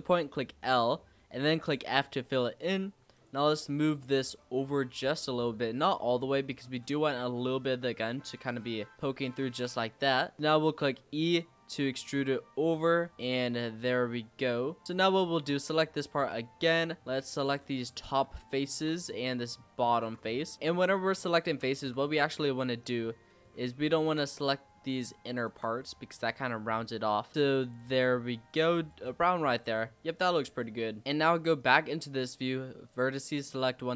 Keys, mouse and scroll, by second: 1.4 f, 2.0-3.1 scroll down 2, 3.1-4.4 drag, 7.0-8.9 middle drag, 8.9 click, 9.0-10.3 shift+middle drag, 10.3 e, 13.1 Tab, 13.2 click, 13.4 scroll down 2, 13.5-14.8 middle drag, 14.8 click, 15.1 Tab, 15.5 middle click, 15.7-16.1 scroll up 1, 16.1 click, 17.0 middle click, 17.4 shift+click, 17.9 middle click, 18.6 shift+click, 18.9 middle click, 19.8 shift+click, 20.2 middle click, 21.1 ctrl+z, 21.4 ctrl+z, 21.8 ctrl+z, 22.8 click, 23.1 scroll up 3, 23.3 middle click, 23.8 shift+click, 24.3 middle click, 25.2 shift+click, 25.6-27.3 middle drag, 27.3 ctrl+b, 29.0 Tab, 29.2-29.5 scroll down 4, 29.5 click, 29.7-31.0 middle drag, 31.0 scroll down 1, 31.0-31.5 scroll up 3, 31.5 click, 32.1-32.8 scroll down 3, 32.8 click, 33.2-33.5 scroll up 3.